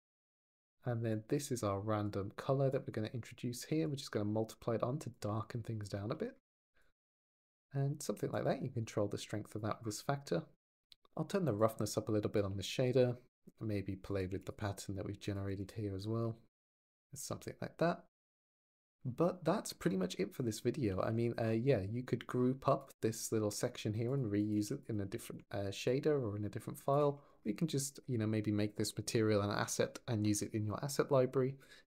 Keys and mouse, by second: 0.0 click, 0.9 click, 1.8 click, 3.6 ctrl+shift+click, 5.0 ctrl+click, 6.6 ctrl+shift+click, 8.2-9.5 drag, 10.1 click, 10.6 click, 11.4 ctrl+click, 12.4 click, 14.0 click, 15.1 click, 17.0 ctrl+s, 20.8 shift+middle drag, 23.9 click, 24.2 click, 24.4 g, 24.7 click, 25.7 drag, 27.0 click.